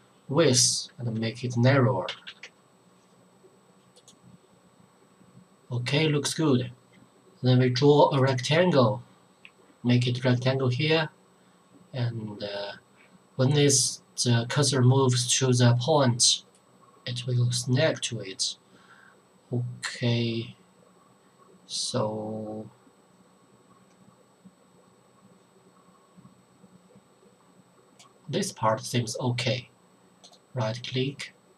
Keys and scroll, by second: 2.1 KP_2, 2.2 KP_8, 2.4 KP_0.